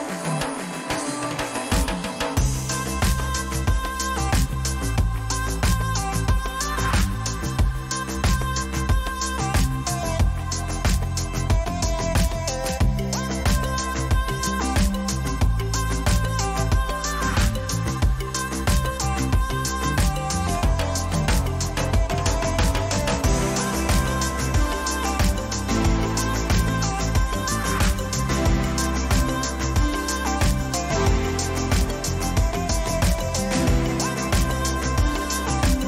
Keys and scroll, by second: 0.4 ctrl+t, 6.3 Return, 6.9 ctrl+-, 10.5 ctrl+t, 14.6 Return, 16.6 ctrl++, 18.7 ctrl+t, 22.8 Return, 23.7 Left, 25.9 Right, 27.2 ctrl++, 27.7 ctrl+-, 28.7 ctrl++.